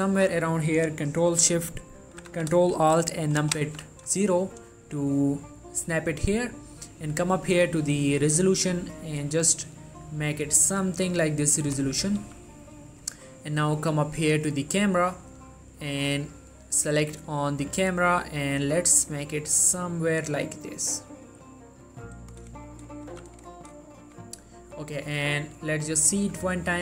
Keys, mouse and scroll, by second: 6.0-12.4 drag, 12.4 g, 13.1 click, 16.4-19.7 drag, 19.7 g, 22.0 click, 22.8 shift+middle click, 23.0 shift+scroll up 1, 23.2 g, 23.5 click, 24.1 shift+middle click, 25.4 click, 26.6 shift+middle click.